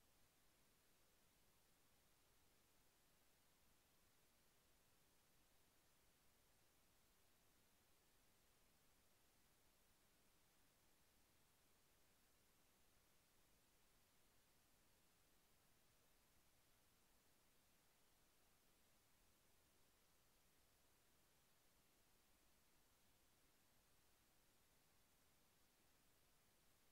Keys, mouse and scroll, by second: 0.9 click, 4.0-5.1 drag, 6.7 click, 9.0 click, 11.3 click, 14.5 click, 15.6 click, 16.6 click, 17.9 click, 20.2 click, 23.5 click, 26.8 click.